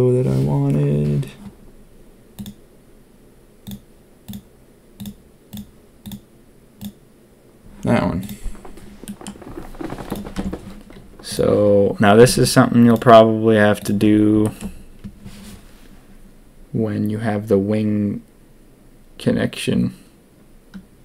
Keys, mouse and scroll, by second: 9.0 middle drag, 10.3 Tab, 11.2 click, 12.1 a, 12.3 a, 12.8 click, 13.7 click, 14.4 shift+click.